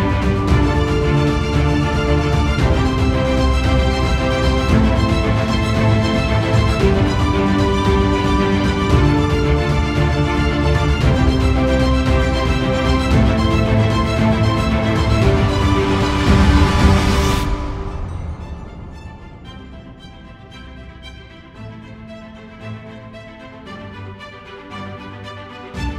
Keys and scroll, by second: 6.0 ctrl+alt+z, 6.6 ctrl+alt+z, 14.9 ctrl+alt+0, 25.8 ctrl+alt+0.